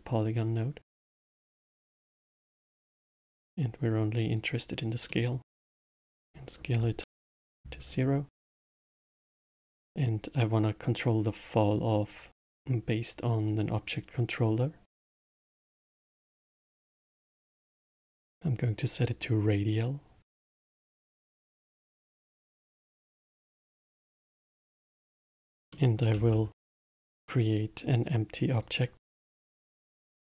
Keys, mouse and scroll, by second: 2.8-4.7 drag, 5.0 middle click, 5.7-8.3 drag, 8.3-9.4 middle drag, 9.4 shift+a, 17.3-22.4 drag, 22.4-23.1 middle drag, 23.1-25.7 drag, 25.7-26.3 middle drag, 26.3 shift+a.